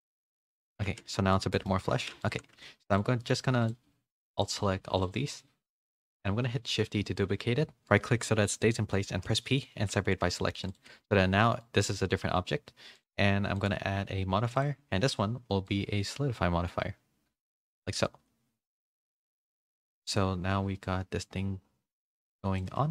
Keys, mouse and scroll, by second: 1.1-1.6 scroll up 2, 1.1 z, 1.2 middle click, 1.9 3, 4.3 alt+shift+click, 4.9-6.5 alt+shift+drag, 6.5 shift+d, 9.1 p, 9.7 Tab, 10.0 a, 10.3 middle click, 10.3 a, 10.8 g, 13.6 click, 15.6-17.5 shift+drag, 18.0-19.0 middle drag, 18.0 a, 19.4 middle click, 21.0-22.6 shift+drag.